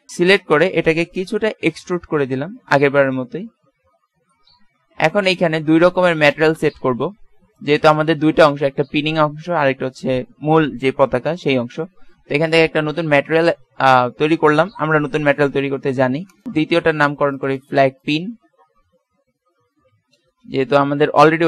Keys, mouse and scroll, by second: 1.7 e, 5.6 middle click, 7.6-9.6 drag, 12.6-14.4 drag, 16.3-19.0 drag, 21.1 Right.